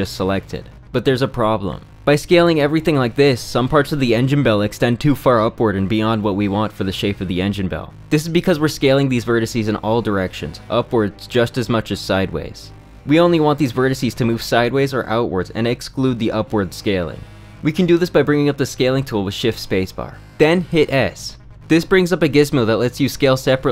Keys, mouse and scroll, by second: 1.8 s, 9.4 s, 12.7 s, 16.2 s, 20.1 space.